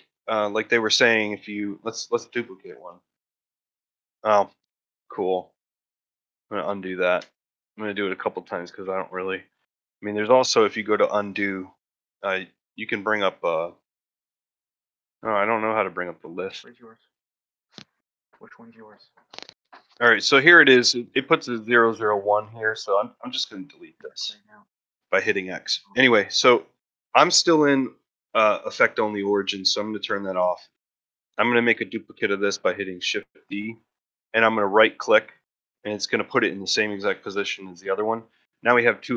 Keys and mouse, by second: 0.4 ctrl+middle drag, 0.8 shift+middle click, 2.3 ctrl+middle drag, 2.7 shift+d, 17.3 drag, 17.4 Escape, 18.0 middle click, 18.4 shift+middle drag, 19.1-19.5 middle drag, 24.0 x, 26.3 click, 27.5-30.1 drag, 30.7 middle drag, 32.8 shift+d, 38.5 click.